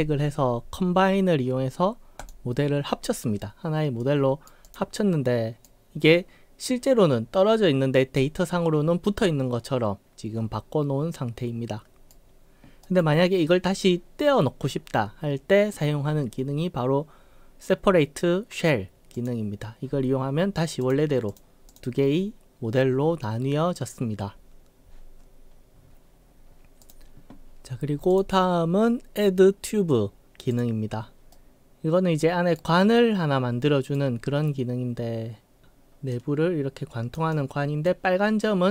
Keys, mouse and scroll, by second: 2.2 click, 4.0-4.5 right drag, 4.7 click, 5.0-5.6 right drag, 8.2-12.1 right drag, 12.9 right click, 19.2 click, 20.9 click, 21.4 click, 21.8 click, 25.8 scroll up 3, 26.9 click, 28.2 click, 30.5 click, 31.3-32.6 right drag, 32.9-34.0 right drag, 36.2-37.1 drag, 37.3-37.9 right drag.